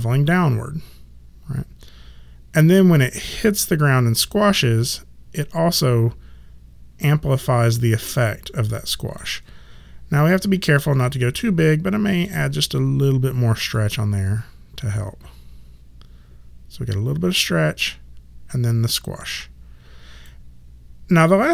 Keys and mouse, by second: 10.1 click, 10.9 ctrl+middle click, 13.6 click.